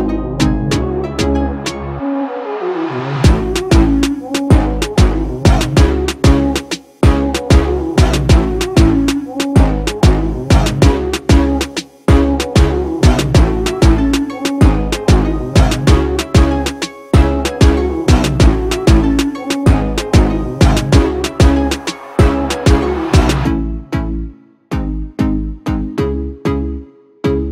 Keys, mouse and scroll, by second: 1.4 shift+click, 16.8 double click, 20.6 ctrl+-, 21.0 ctrl+-, 23.2 ctrl+=, 24.0 ctrl+=, 25.1 ctrl+-, 26.7 ctrl+=.